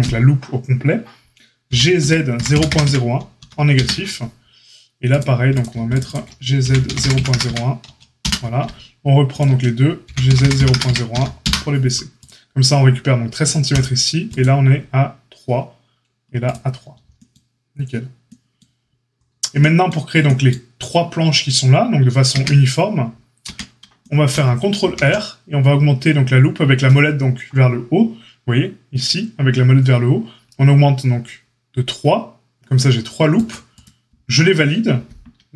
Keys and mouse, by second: 1.6 g, 5.1-5.5 drag, 5.5 alt+middle click, 5.8 alt+shift+click, 5.9 alt+shift+middle click, 6.0 alt+shift+click, 6.0-35.5 alt+shift+middle drag, 6.6 g, 10.0 g, 14.2 click, 24.8 ctrl+r.